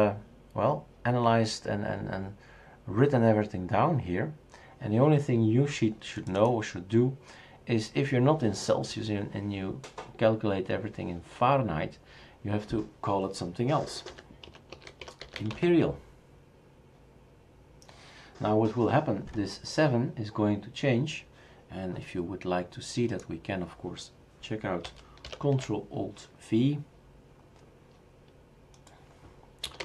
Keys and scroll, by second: 13.9-16.0 typing, 25.2 ctrl+alt+v, 29.4-29.8 typing.